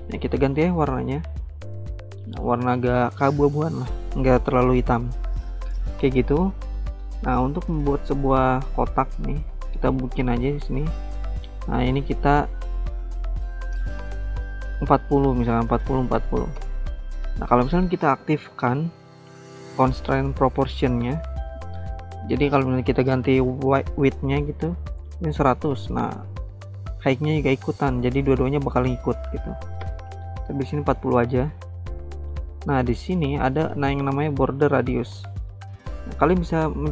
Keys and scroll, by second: 14.8-16.4 typing, 16.5 Return, 24.7-25.6 typing, 25.8 Return, 28.6-30.3 typing, 31.7-32.4 typing, 33.6-34.3 typing.